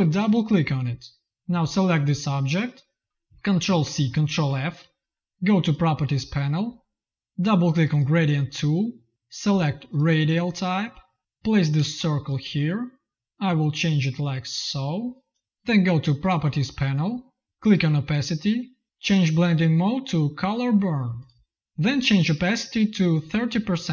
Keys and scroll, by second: 3.5 ctrl+c, 4.2 ctrl+f, 11.7 space.